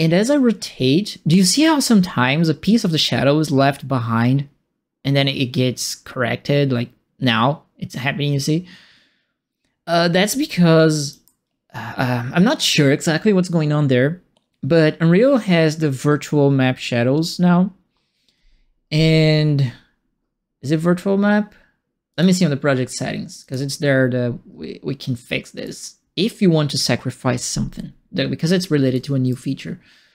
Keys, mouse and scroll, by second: 22.1 click, 23.4 click, 25.6 right click, 28.9 right click.